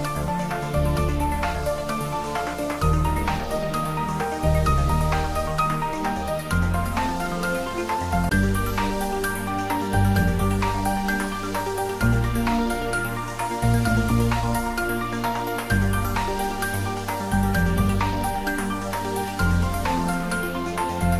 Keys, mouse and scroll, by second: 0.3-2.7 middle drag, 2.7 g, 3.0 y, 4.0 click, 4.4-8.2 middle drag, 8.2 g, 10.2 y, 11.5 click, 13.0-15.3 middle drag, 15.3 click, 16.1 scroll up 1, 17.1-18.9 drag, 18.9 g, 19.1 y.